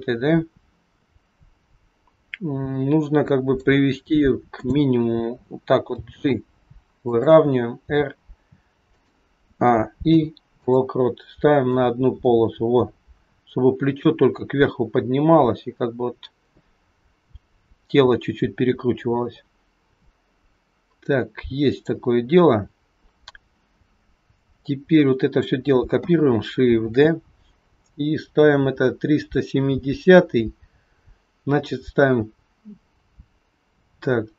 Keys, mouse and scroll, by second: 4.5 click, 5.9 g, 7.9 r, 9.5 a, 10.0 i, 11.7 click, 22.4-23.0 scroll down 2, 24.4 click, 26.9 shift+d.